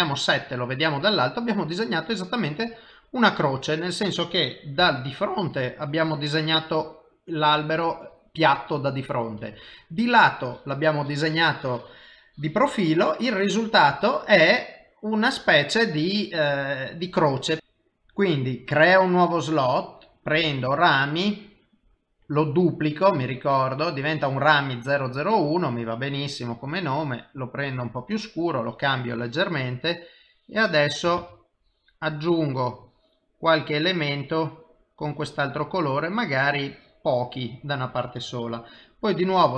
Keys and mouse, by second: 3.0 middle click, 4.8 KP_1, 9.4 KP_3, 13.4 middle click, 18.8 click, 19.7 click, 24.7 click, 29.2 click, 30.2 click, 31.2 ctrl+z, 31.6 click, 32.8 click, 35.0 click, 38.7 middle click.